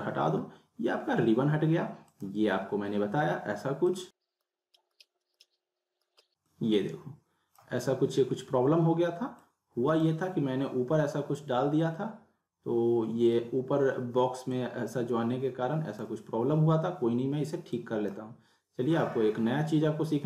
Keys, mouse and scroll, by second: 2.1 click, 6.0 drag, 14.5-16.0 drag.